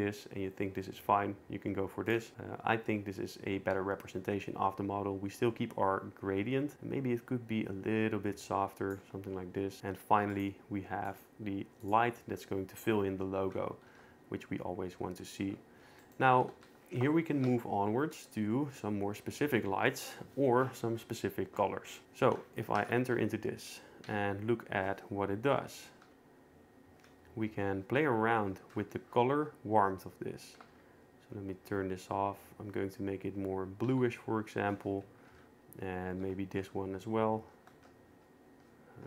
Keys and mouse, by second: 2.1-3.9 drag, 6.7-8.9 shift+drag, 10.4 click, 11.9 click, 14.0 ctrl+s, 16.6 ctrl+s, 22.8 shift+Tab, 24.1 q, 25.6 q, 25.9 Right, 26.0 q, 30.7 q, 35.3 Right, 35.3 Down, 37.8 q.